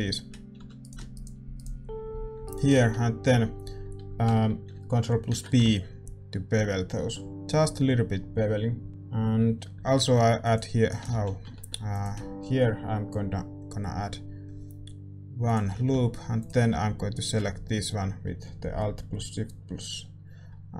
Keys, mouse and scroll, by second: 0.5 a, 2.7-5.2 middle drag, 5.2 ctrl+b, 8.9-10.8 middle drag, 8.9 a, 9.9 ctrl+r, 11.1 ctrl+z, 11.5 ctrl+r, 15.8 a, 16.3-20.7 drag, 17.1-20.7 right drag.